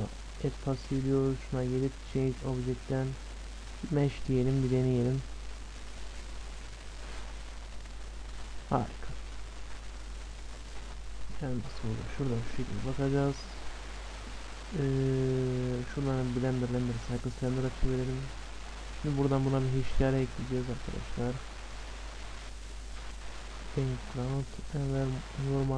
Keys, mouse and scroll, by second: 0.0-3.9 right drag, 5.0-6.8 drag, 8.6-10.3 drag, 9.0-13.7 middle drag, 16.3-18.3 drag, 18.9-22.9 drag, 23.3-25.2 drag, 25.7 click.